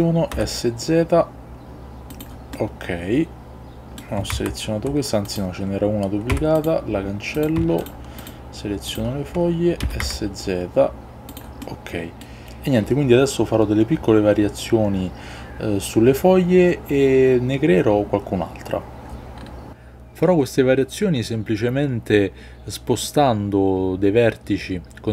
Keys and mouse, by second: 0.4 z, 2.2 click, 2.7-4.1 middle drag, 4.4 ctrl+z, 5.3 click, 6.4 x, 7.4 click, 9.9 s, 10.1 z, 11.4-11.7 drag, 11.7-25.0 middle drag, 25.0 r.